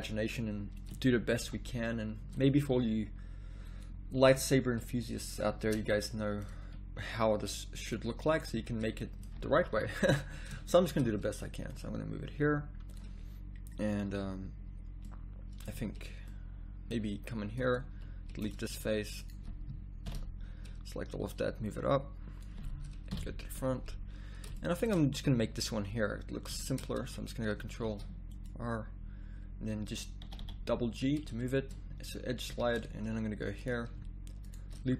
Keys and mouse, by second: 1.1 middle click, 1.4 g, 2.8 s, 4.2 g, 5.7 Tab, 8.5 z, 9.7 KP_1, 10.1 z, 15.7 z, 17.1 z, 17.9 x, 18.6 z, 20.1 ctrl+l, 23.1 KP_1, 23.5 z, 27.0 a, 27.9 ctrl+r, 32.5 a, 33.7 click.